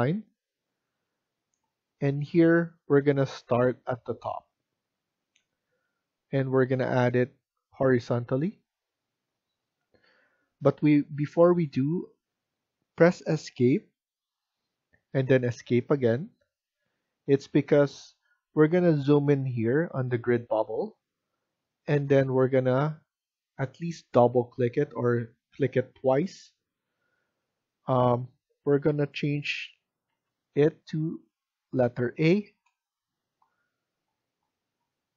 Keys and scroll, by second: 3.2-4.0 typing, 13.9 Escape, 15.0 Escape, 30.0 a, 32.4 Return.